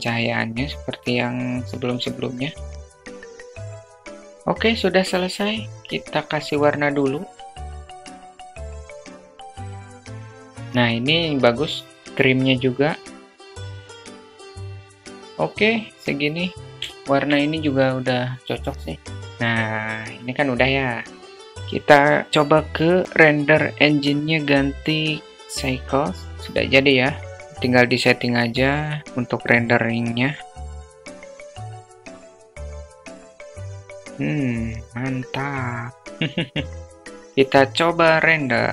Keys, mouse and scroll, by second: 0.3-2.2 drag, 1.7 0, 2.7 click, 2.8-4.2 typing, 2.9 alt+middle click, 3.0 click, 3.1 alt+middle click, 3.6 click, 3.7 click, 3.9 click, 7.8 drag, 8.0 click, 11.2 click, 11.9 click, 12.5 click, 13.0 drag, 15.2 drag, 16.1-16.4 alt+shift+drag, 22.6-24.1 drag, 27.4-28.1 drag, 29.1 click, 30.1 drag, 30.3-30.8 drag, 31.0 click, 31.2 drag, 31.8 drag, 32.1 click, 32.9 click, 33.2 click, 33.4 click, 34.6 click.